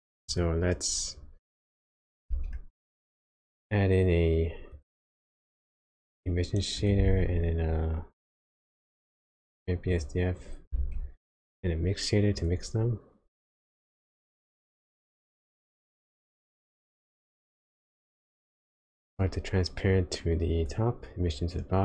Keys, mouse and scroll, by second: 0.2 click, 2.2 shift+a, 7.0 shift+a, 10.8 shift+a, 18.2 click, 19.9 click, 21.3 click.